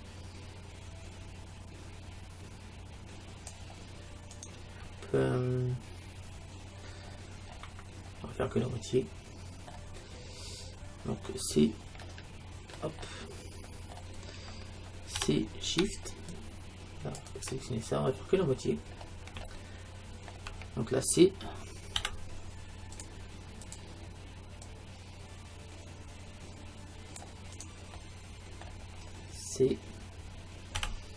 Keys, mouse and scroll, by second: 4.5-6.4 right drag, 4.8 middle click, 7.1-10.5 middle drag, 7.1-8.7 scroll down 1, 12.0 alt+', 13.1 middle click, 14.7-16.0 middle drag, 15.2 c, 18.6-21.1 middle drag, 22.0 c, 28.0 middle click, 28.1-29.9 middle drag, 30.8 c.